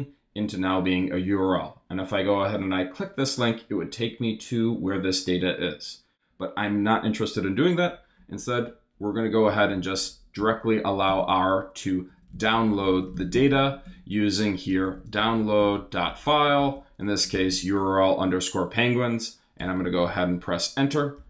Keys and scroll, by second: 10.4 super+Return, 10.9-18.1 typing, 19.6 Return, 21.2 ..